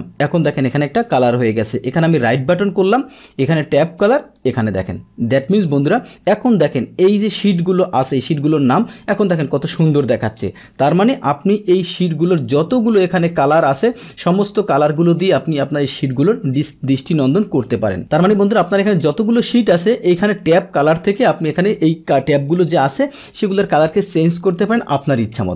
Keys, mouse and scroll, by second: 1.8 right click, 4.3 click, 5.3 click, 12.6-13.6 right drag, 18.0 right click, 21.7 click.